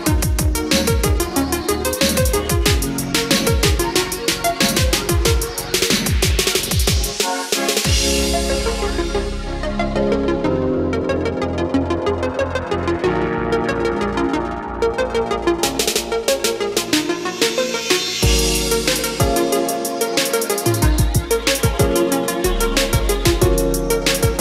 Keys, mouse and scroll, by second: 15.5-21.4 drag.